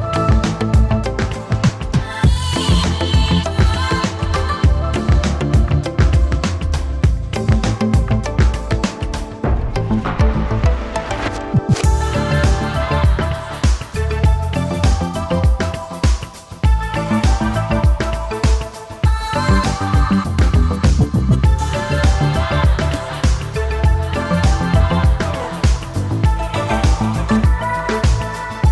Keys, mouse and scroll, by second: 3.6-4.8 typing, 7.9-9.1 typing, 9.4 Tab, 17.9 s.